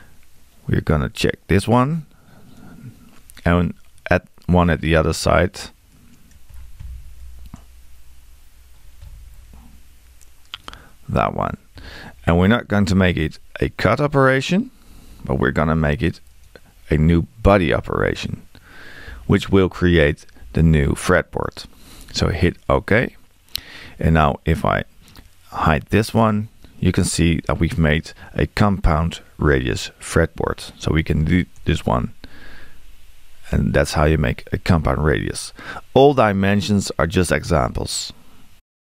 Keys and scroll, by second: 31.6 BackSpace.